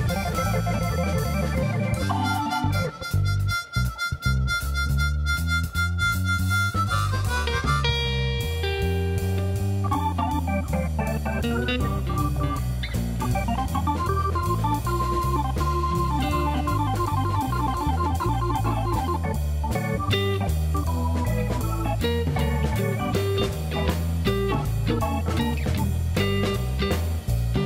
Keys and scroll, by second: 19.7 Tab, 22.4 2.